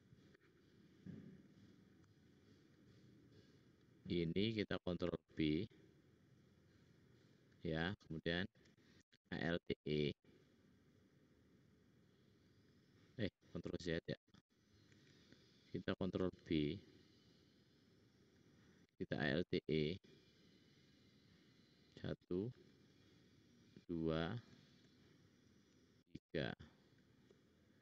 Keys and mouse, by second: 1.4 click, 1.6 click, 1.6 middle click, 1.6 right click, 2.0-4.2 shift+drag, 2.6 shift+middle click, 2.6 shift+right click, 3.6 shift+middle click, 3.6 shift+right click, 4.6 ctrl+click, 5.0 ctrl+b, 9.1 alt+e, 13.8 ctrl+z, 14.8 ctrl+z, 16.3 ctrl+b, 19.0 alt+e, 22.4 alt+e, 24.7 alt+e, 26.8 middle click, 26.8 click, 27.3-27.8 middle drag.